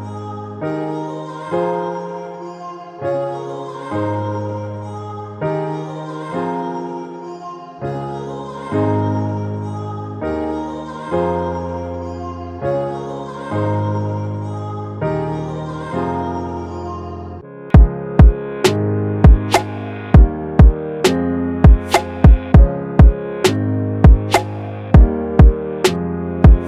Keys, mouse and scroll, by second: 9.2-10.5 scroll down 1, 10.5 scroll down 1, 10.5 scroll up 1, 16.0 alt+click, 24.1 double click, 26.2-26.6 typing.